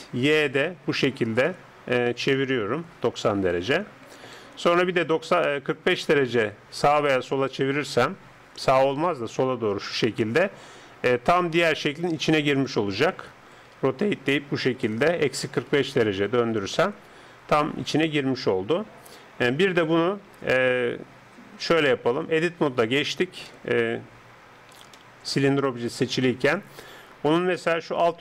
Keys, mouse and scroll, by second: 6.2-9.6 middle drag, 9.6 r, 13.7 r, 19.8-27.4 middle drag, 22.5 Tab, 24.2 Tab, 24.6 Tab, 27.4-28.2 drag.